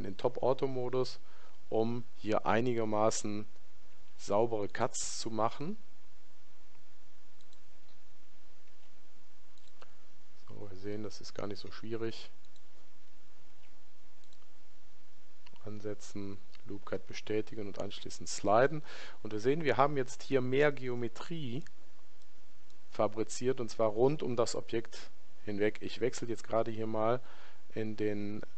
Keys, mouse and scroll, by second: 4.0 ctrl+r, 20.4-24.1 middle drag.